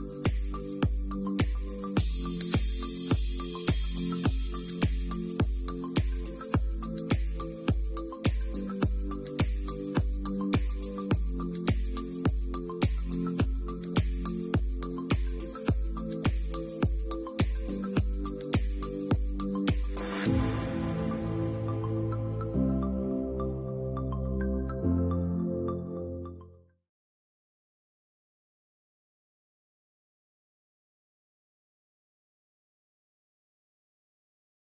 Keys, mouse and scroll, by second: 0.0 middle click, 1.8 middle click, 2.2-2.6 scroll down 3, 2.6 middle click, 3.5-3.9 scroll down 2, 3.9 shift+middle click, 4.2 shift+middle click, 4.6 middle click, 5.3-6.1 scroll up 2, 6.1 alt+shift+click, 6.5 right click, 8.9 a, 9.9 a, 9.9 u, 14.9 Tab, 15.8 middle click, 16.3-16.9 scroll down 1, 17.0 shift+middle click, 17.0 scroll down 5, 18.1 middle click, 19.1-19.5 scroll down 2, 19.5 shift+middle click, 20.3 click, 25.4 click, 27.4 shift+middle click, 27.7 alt+q, 28.7 middle click, 29.7 shift+middle click, 31.0 shift+click, 32.1 h, 32.9 click, 33.3 middle click, 34.3 click.